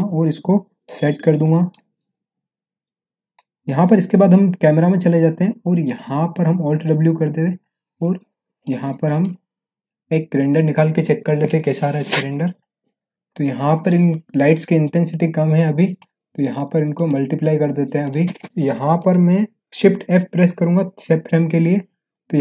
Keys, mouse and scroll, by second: 1.1-1.8 alt+middle click, 2.7-3.4 drag, 4.7 c, 7.0 alt+w, 8.6-9.2 middle drag, 10.4 click, 16.9 click, 18.0 click, 18.4 right click, 19.0-19.5 middle drag, 20.5 shift+f, 22.1-22.4 middle drag.